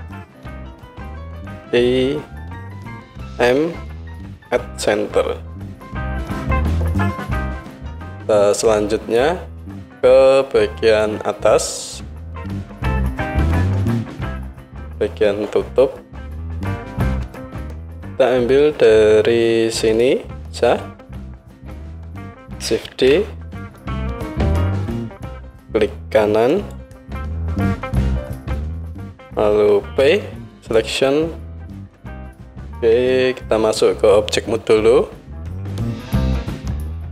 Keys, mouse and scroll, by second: 0.9-8.5 middle drag, 1.3 i, 3.5 m, 6.4 Tab, 7.2 KP_1, 8.5-20.0 drag, 17.7 Tab, 20.0-35.9 alt+middle drag, 22.9 shift+d, 30.0 p, 34.7 Tab, 35.9 click, 35.9 middle drag, 36.2 click, 36.3-37.1 middle drag.